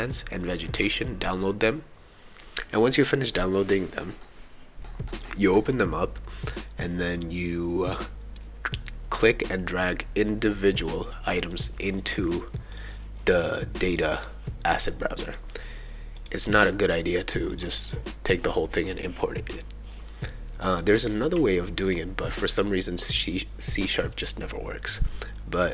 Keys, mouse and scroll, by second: 12.7 click, 13.9 click, 15.3 click, 16.1 click, 16.5 right click, 17.5 click, 20.7 click, 22.3 click.